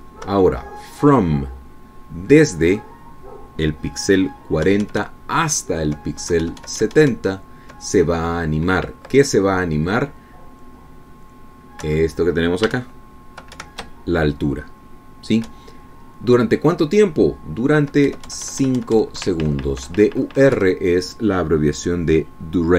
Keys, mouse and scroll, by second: 1.0 Right, 6.3 Right, 10.7 Left, 13.4 Right, 14.3 shift+Right, 17.1 Right, 21.0 Left, 22.2 Right.